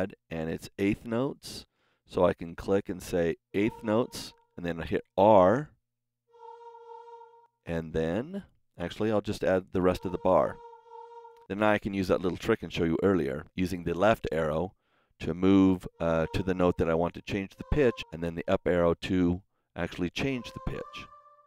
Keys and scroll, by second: 6.1 r, 9.7 r, 13.4 Left, 15.8 Right, 17.4 Up, 17.9 Right, 20.1 Up.